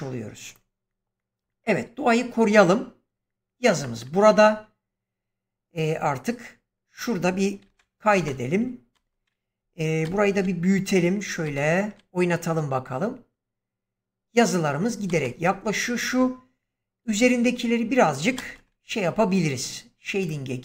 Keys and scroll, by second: 7.6 ctrl+s, 8.1 space, 9.9 ctrl+space, 15.0 space, 16.9 Escape, 18.3 ctrl+space.